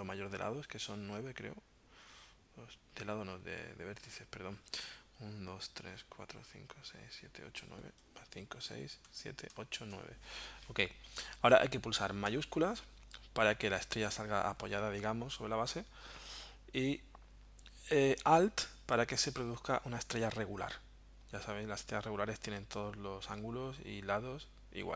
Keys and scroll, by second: 8.0 Up, 9.1 Up.